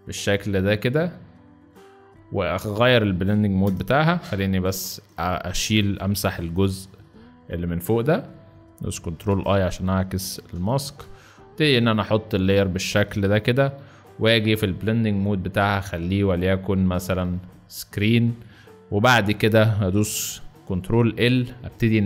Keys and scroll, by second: 3.5 shift+Return, 4.5 w, 9.0 ctrl+i, 10.2 v, 10.9 shift+v, 12.9 ctrl+shift+v, 20.6 ctrl+l.